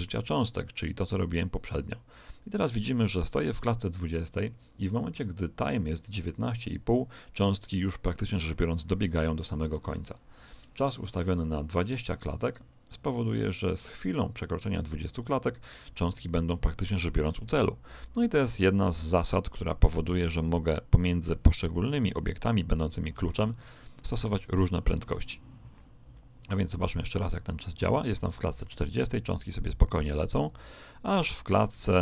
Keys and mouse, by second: 10.5 click, 16.3-18.1 middle drag, 18.5 click, 21.9-25.4 right drag, 26.3 click.